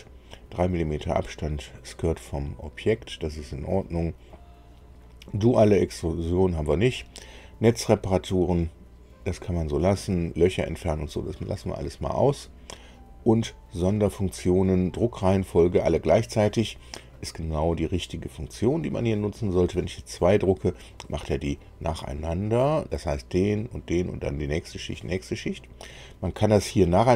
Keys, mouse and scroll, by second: 10.6 click, 25.8 click.